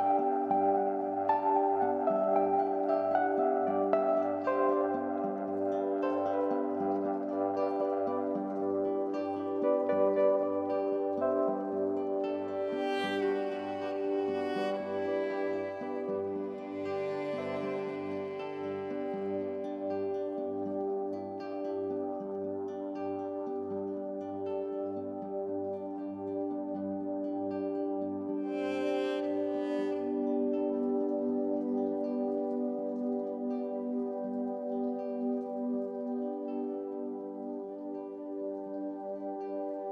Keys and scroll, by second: 13.3 x, 15.7 x, 16.0 ctrl+z, 20.2 x, 20.5 x, 20.9 ctrl+z, 21.1 ctrl+z, 28.2 ctrl+z.